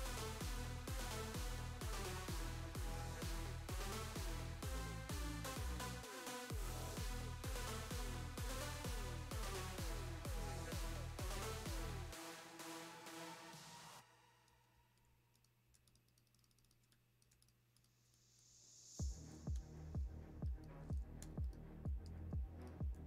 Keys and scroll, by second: 0.5 space, 2.4 super+g, 4.1 v, 6.9 space, 7.4 super+space, 8.1 space, 8.9 space, 9.5 space, 9.5 space, 14.9 super+x, 15.6 space, 16.8-18.4 typing, 19.6 BackSpace, 22.1 super+f, 22.8 space.